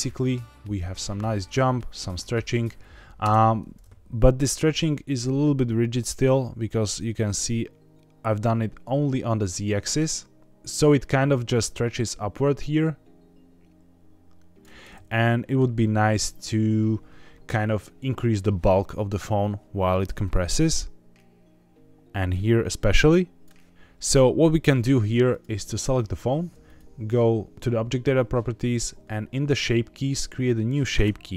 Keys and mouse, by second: 3.2 space, 4.3-5.1 middle drag, 7.1-10.7 drag, 11.6-14.6 drag, 15.0-15.5 middle drag, 20.3-23.4 drag, 23.7 middle click, 25.2 click, 26.6 click.